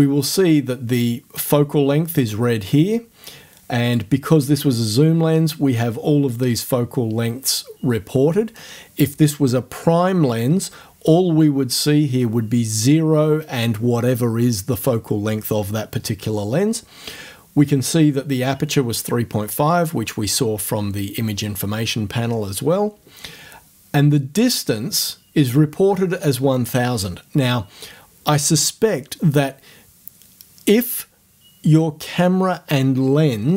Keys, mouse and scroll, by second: 3.9 click.